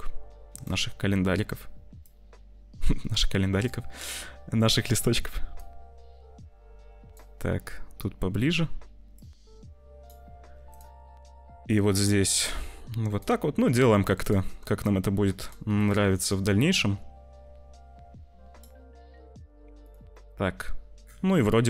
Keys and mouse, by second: 0.5 click, 2.1-3.6 drag, 4.5 click, 5.6-7.0 drag, 9.2 click, 11.8-13.1 drag, 13.1 middle click, 15.7-18.6 middle drag, 20.0 middle click, 21.3 middle click.